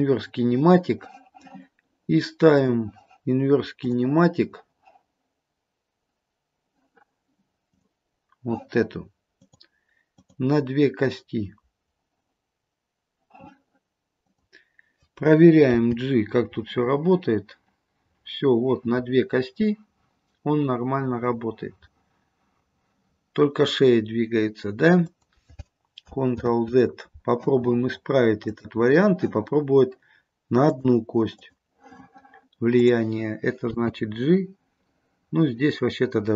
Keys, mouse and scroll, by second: 0.0 ctrl+shift+c, 2.7 click, 3.9 click, 7.8 click, 9.6 click, 10.3 click, 14.3 click, 15.8 g, 26.5 ctrl+z, 28.5 click, 30.8 click, 31.5 click, 32.9 click, 33.8 g.